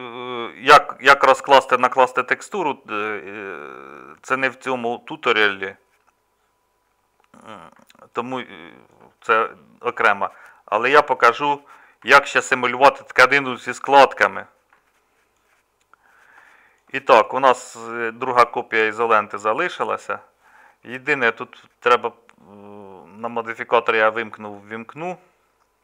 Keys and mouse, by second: 0.0-3.5 drag, 3.9-7.7 drag, 9.0 middle click, 9.9-12.0 middle drag, 13.0-14.7 middle drag, 15.5 middle click, 16.8 middle click.